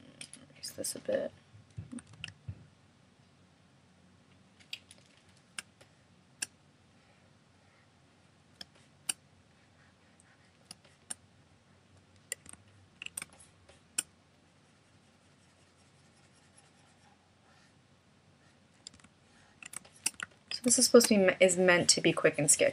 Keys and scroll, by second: 2.1 super+z.